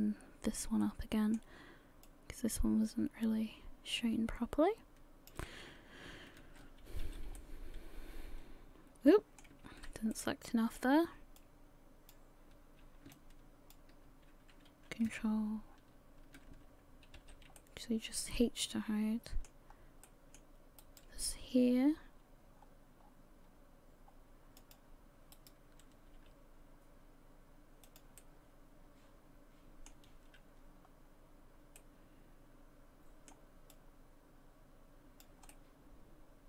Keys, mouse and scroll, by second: 2.0 click, 6.4 ctrl+i, 7.0 h, 7.4 middle click, 9.7 ctrl+z, 10.1 middle click, 11.4 shift+click, 13.1 ctrl+click, 17.2 h, 17.6 middle click, 19.7-20.2 scroll up 2, 20.0 middle click, 20.8 right click, 21.5 g, 25.3 right click, 26.1 g, 28.2 middle click, 31.8 middle click, 33.7 click, 35.5 middle click.